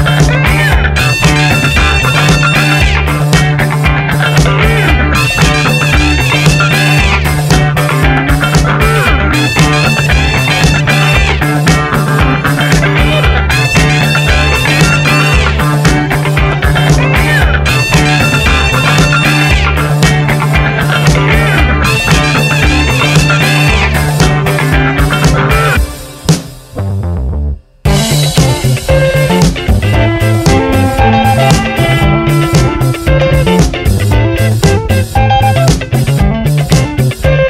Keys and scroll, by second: 0.9 Return, 2.6-4.9 typing, 6.4 BackSpace, 6.7 space, 8.4-10.4 typing, 13.6 ctrl+Return, 14.5 v, 14.6 Up, 15.6 Down.